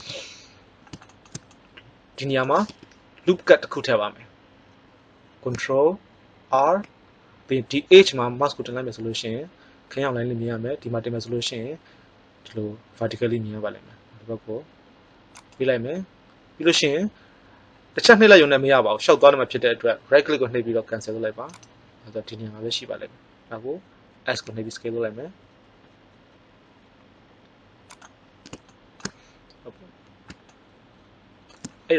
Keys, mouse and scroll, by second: 2.6 KP_1, 6.4 ctrl+r, 24.2 s, 28.6 middle click.